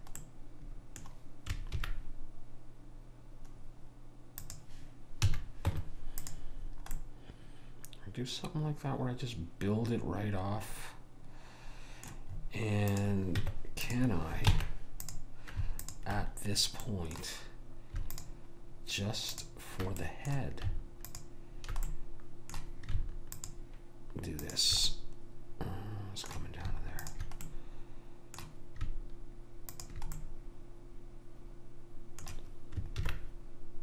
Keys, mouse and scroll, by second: 0.3 middle click, 1.8 ctrl+b, 5.4 a, 5.8 Tab, 13.0 click, 13.5 Tab, 14.5 ctrl+Tab, 15.9 click, 17.0 right click, 17.8 middle click, 18.2-23.0 drag, 18.2-20.2 right drag, 26.4 middle click, 27.1 click, 29.7 click, 31.7 middle click, 33.0 ctrl+b.